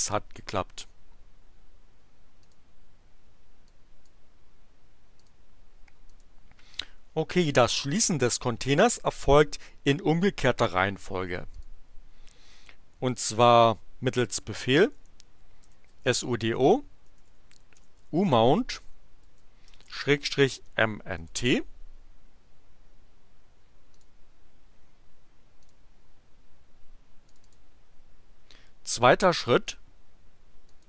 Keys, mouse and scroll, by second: 2.4 click, 3.6-4.2 drag, 5.1 click, 6.1 click, 11.5 click, 14.9-21.0 typing, 21.4 Return, 23.8 click, 25.6 click, 27.2 click, 29.6 click, 30.7 click.